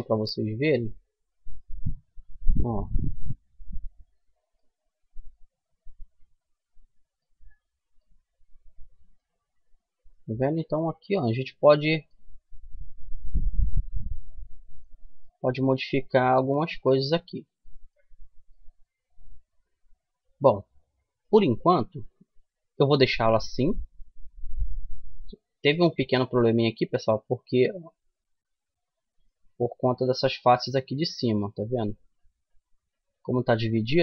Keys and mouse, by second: 2.0 s, 4.1-5.1 middle drag, 5.5-8.0 middle drag, 8.5 a, 13.1 middle click, 14.3 middle click, 15.9 Tab, 17.8-19.6 middle drag, 21.3-23.1 middle drag, 25.5-29.1 middle drag, 27.5 Tab, 29.1-30.2 drag, 30.8 click, 31.0-34.0 middle drag.